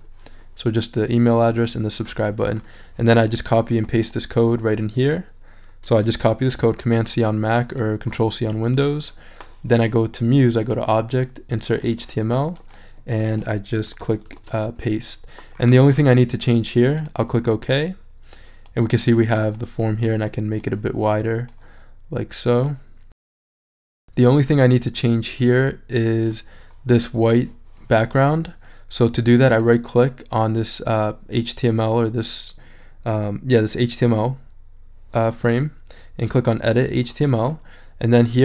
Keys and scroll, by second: 4.3 super+a, 6.2 super+c, 13.9 BackSpace, 14.3 super+v.